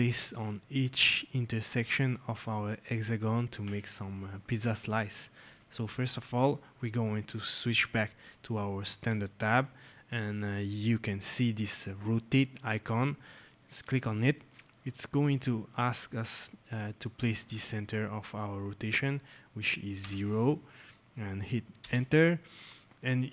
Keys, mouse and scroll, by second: 14.1 click, 19.9 KP_0, 21.7 Return.